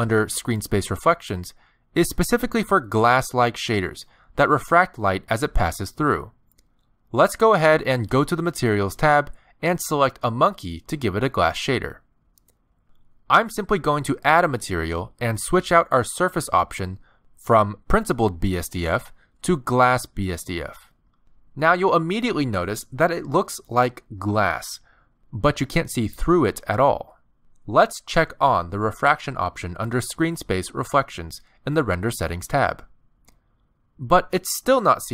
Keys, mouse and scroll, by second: 8.3 click, 10.8 click, 13.1 click, 16.1 click, 23.5 middle click, 26.1 middle click, 30.3 click, 32.1 click, 33.8 middle click, 34.7 g.